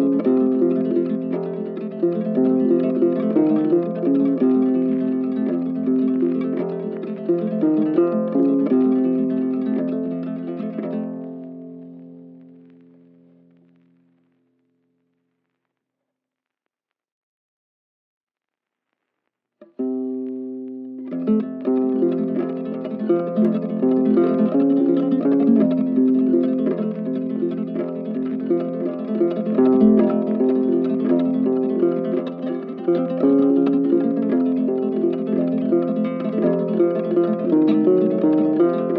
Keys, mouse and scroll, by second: 1.8 ctrl+z, 3.6 alt+click, 4.0 alt+click, 5.1 alt+click, 6.3 shift+click, 7.8 right click, 9.6 ctrl+z, 9.7 ctrl+right click, 14.3 double click, 16.4 ctrl+click, 16.8 ctrl+z, 17.1 shift+click, 18.7 shift+click, 22.7 shift+click, 27.1 right click, 28.7 super+click, 29.1 ctrl+z, 29.7 shift+click.